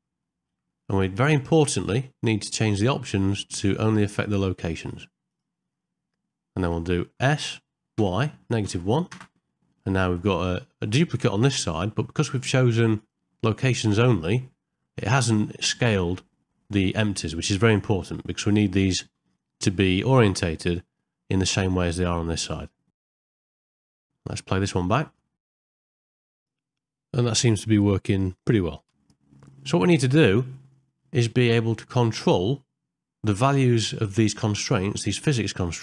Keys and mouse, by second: 0.3 ctrl+middle click, 0.8 shift+middle click, 2.8-5.8 drag, 6.3 shift+middle click, 13.0-14.9 drag, 19.0-20.1 middle drag, 20.5 shift+middle click, 21.0 ctrl+middle click, 21.4 middle click, 22.9 ctrl+middle click, 23.1 shift+middle click, 24.1 middle click, 24.6 middle click, 26.7 space, 28.5 shift+Left, 30.0-31.0 middle drag, 31.4 ctrl+middle click.